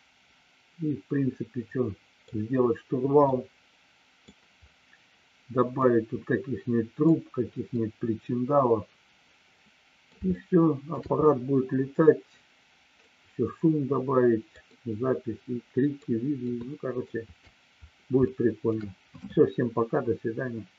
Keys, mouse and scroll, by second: 3.3 middle click, 5.7-6.9 middle drag, 7.7-10.1 middle drag, 10.2 shift+middle click, 13.1-14.5 middle drag, 14.6-15.9 middle drag, 16.5 shift+middle click, 18.2 shift+middle click.